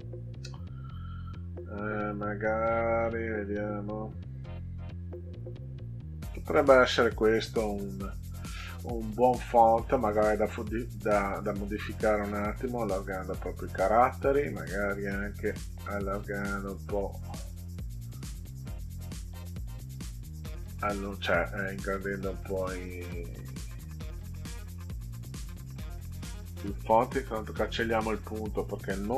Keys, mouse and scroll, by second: 0.7 click, 1.9 click, 2.9 click, 11.5 click, 12.2 click, 12.5 click, 13.1 click, 15.6 click, 16.3 click, 16.5 click, 17.2 click, 17.5 click, 20.7 click, 21.1 click, 22.1 click, 22.7 click, 25.6 click, 27.8 Delete.